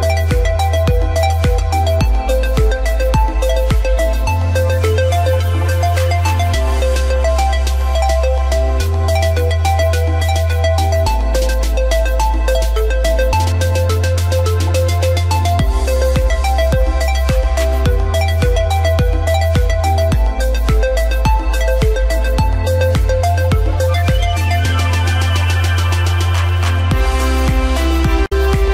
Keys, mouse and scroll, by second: 7.5 click.